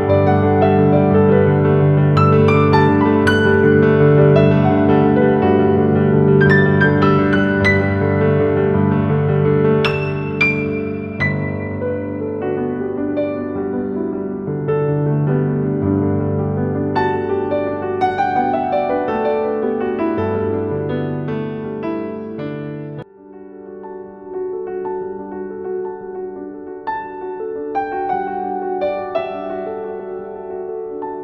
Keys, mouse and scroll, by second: 0.3 click, 2.8 ctrl+v, 5.0-5.3 scroll up 1, 6.6-7.7 typing, 6.8 click, 7.9 click, 10.0-12.9 alt+shift+drag, 18.6-21.3 typing, 19.2 click, 20.5 click, 20.8 click, 22.4 z, 23.5 click, 26.0-31.2 shift+drag.